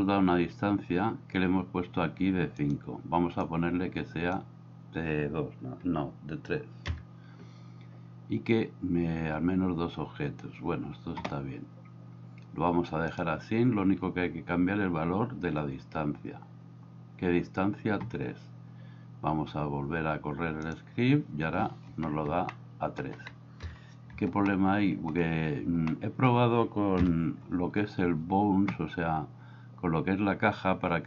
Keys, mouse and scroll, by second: 3.5 click, 3.9 click, 6.9 KP_3, 22.5-23.1 middle drag, 23.7 KP_1, 24.6-25.2 middle drag, 25.9 middle click, 27.0 KP_1.